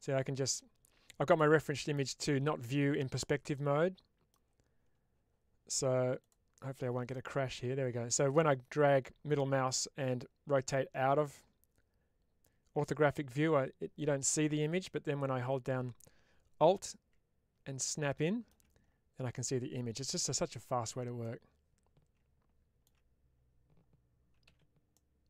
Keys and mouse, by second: 7.1-18.4 middle drag, 21.1-22.8 middle drag, 24.8 middle click.